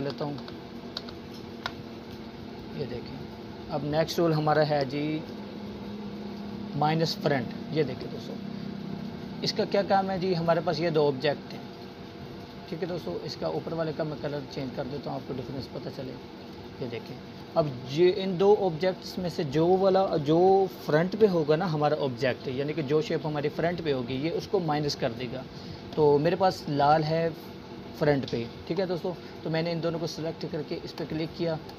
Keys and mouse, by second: 3.3-4.9 drag, 10.8-13.4 drag.